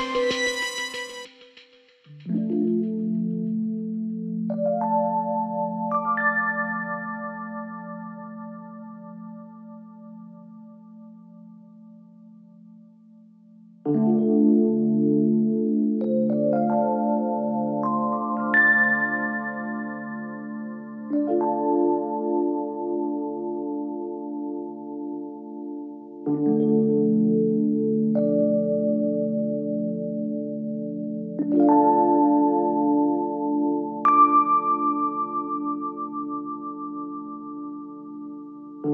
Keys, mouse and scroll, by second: 1.9 click, 2.4 g, 4.9 s, 6.0 click, 6.9 g, 8.0 click, 8.2 g, 9.4 click, 9.7 g, 11.9-12.6 scroll down 4, 12.6 Tab, 14.0-15.6 drag, 15.6 ctrl+1, 17.2-17.5 scroll down 3, 17.5-19.1 middle drag, 19.1 drag, 20.0 Tab, 20.3-20.9 scroll up 1, 20.9 a, 21.2 3, 22.0 e, 23.9 Tab, 24.1-24.7 scroll down 2, 24.7 KP_1, 25.3-26.3 scroll down 2, 26.4 click, 27.8-28.2 scroll up 2, 28.2 scroll down 1, 29.1-32.0 drag, 32.0 scroll up 2, 32.3-33.0 scroll down 6, 33.0-33.9 shift+middle drag, 33.9-36.9 scroll up 2, 38.8 click.